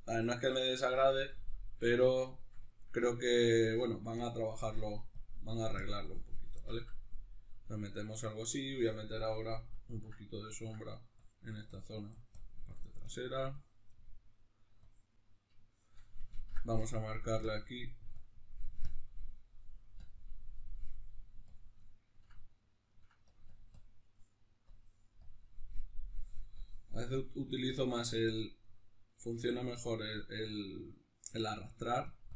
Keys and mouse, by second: 3.6-6.6 drag, 6.6-9.2 ctrl+middle drag, 9.2 click, 9.6-11.2 middle drag, 11.2-13.9 drag, 13.9 middle click, 14.8 click, 15.4-16.8 middle drag, 16.8-21.8 drag, 21.8-23.3 middle drag, 23.3-29.1 drag, 29.1 middle click, 29.4-31.6 drag, 31.6 middle click, 32.0-32.3 drag.